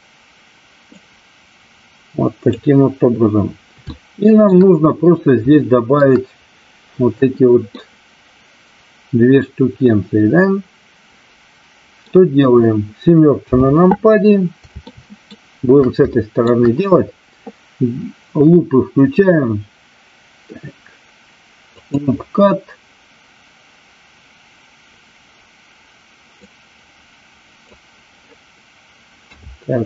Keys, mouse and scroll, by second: 0.9-2.6 drag, 3.8 shift+middle click, 5.6 shift+middle click, 7.7-9.4 middle drag, 9.7-12.0 middle drag, 13.3 KP_7, 14.9 shift+middle click, 16.0 shift+middle click, 26.4-27.7 drag, 29.2 a.